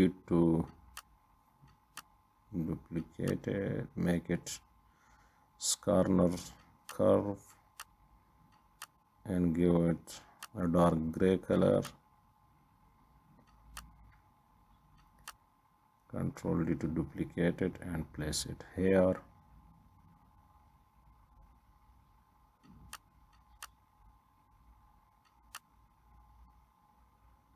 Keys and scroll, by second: 0.3 Left, 14.4 ctrl+d, 20.8 Left, 21.3 Left, 24.5 ctrl+d.